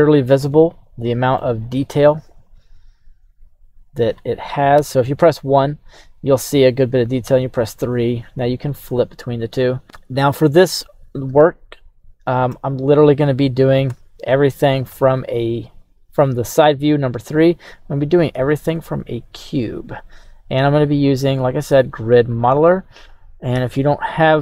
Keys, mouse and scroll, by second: 1.0 middle click, 1.7 right click, 2.5-4.2 drag, 4.8 KP_1, 7.2 KP_3, 10.6-11.7 scroll down 1, 11.7-12.5 shift+middle drag, 13.9 KP_2, 13.9 KP_1, 14.9 KP_3, 18.7 shift+a.